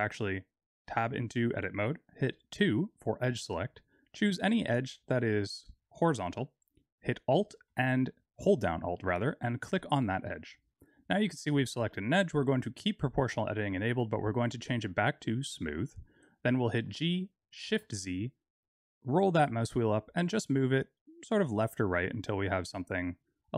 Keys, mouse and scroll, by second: 2.5 2, 4.8-5.5 scroll up 2, 5.5-6.0 scroll up 2, 9.5 alt+click, 10.3-11.3 scroll down 5, 13.5 click, 16.8 g.